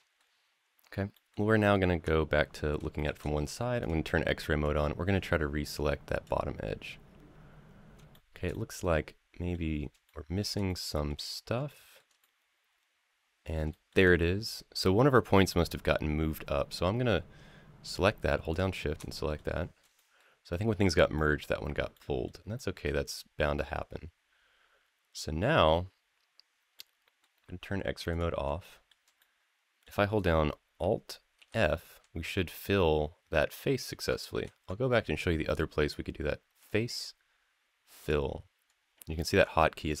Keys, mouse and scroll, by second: 0.4-0.9 scroll up 1, 0.9 middle drag, 2.4 scroll down 1, 2.7 shift+middle click, 3.6 click, 4.4-6.0 drag, 6.8-7.8 scroll up 5, 7.9 shift+middle click, 8.3-9.3 middle drag, 9.5 scroll down 1, 9.8 shift+middle click, 10.5 middle click, 11.0 scroll down 2, 11.5-11.8 shift+middle drag, 12.0-13.3 middle drag, 13.5 shift+middle click, 13.9 scroll up 2, 14.4 scroll down 1, 18.3 shift+click, 18.9 middle click, 19.3 scroll down 2, 19.7 shift+middle click, 20.3 shift+middle click, 20.9 shift+middle click, 21.7 shift+middle click, 22.3 shift+middle click, 22.9-25.4 middle drag, 26.1-26.5 scroll down 3, 26.5 middle click, 27.9 click, 28.4 shift+middle click, 29.0 middle click, 31.2 alt+f, 34.2 ctrl+z, 36.4-37.9 drag, 39.1 ctrl+z, 39.7-40.0 drag.